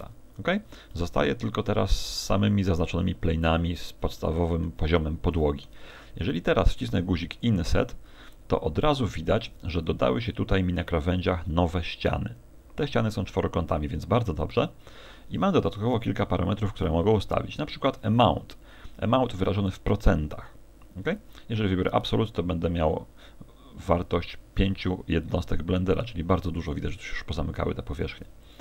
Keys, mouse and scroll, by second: 0.6 Escape, 0.9 middle click, 2.6 middle click, 7.4 click, 8.9 scroll up 4, 19.7 click, 28.4 click.